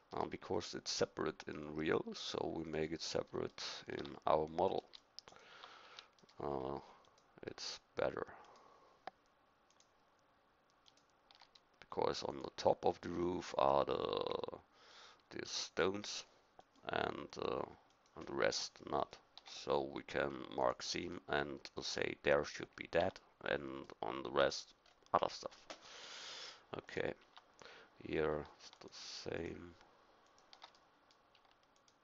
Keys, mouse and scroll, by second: 3.5 middle click, 4.0 Tab, 5.5 Tab, 23.0 Tab, 26.9 click, 27.2 Tab, 27.7-30.4 middle drag, 30.7-32.0 middle drag.